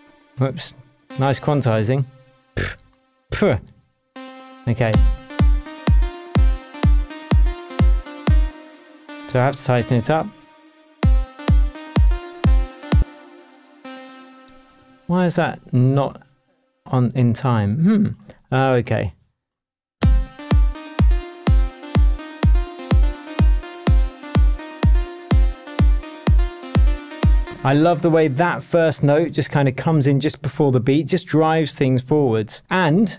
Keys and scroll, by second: 4.8 space, 8.4 space, 9.2 Left, 10.9 space, 12.9 space, 14.8 shift+Tab, 19.9 space, 20.9 space, 22.3 shift+Tab, 27.4 space, 30.6 shift+Tab.